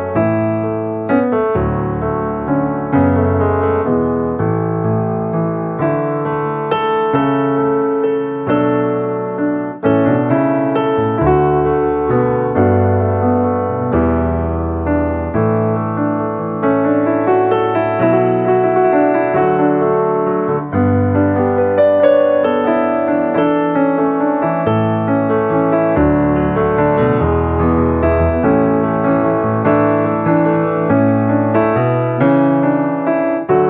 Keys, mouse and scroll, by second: 0.0-1.7 drag, 1.7 click, 2.9 space, 3.0 click, 3.4 space, 3.6-5.0 drag, 5.0-6.9 drag, 7.2 space, 7.3 click, 7.9 space, 8.4 click, 9.3 space, 9.5-10.6 drag, 10.8 space, 11.2 click, 11.7 space, 12.0 click, 12.0 space, 12.3 click, 13.2 space, 13.5-15.0 drag, 15.0 space, 15.1-16.2 drag, 16.2 space, 16.4 click, 18.7 space, 18.8 click, 18.8 space, 18.9 click, 19.4 space, 19.6 click, 19.8 space, 20.0-22.2 drag, 22.2-24.1 typing, 23.3 click, 23.6 click, 24.0 click, 24.4-25.9 drag, 25.9 space, 26.1 click, 27.6 space, 27.7 click, 27.7 space, 27.8 click, 28.3 space, 28.5 click, 29.5 space, 30.2 space, 30.2 click, 30.3 space, 31.1 click, 31.7 [, 31.9 click, 32.8 alt+click, 33.2 alt+click.